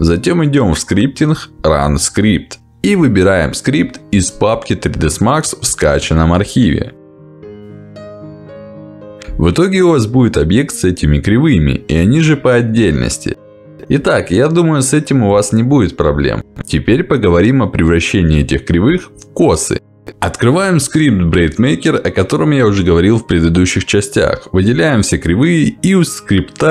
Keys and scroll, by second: 11.3 w, 11.6 ctrl+z, 14.3 Delete.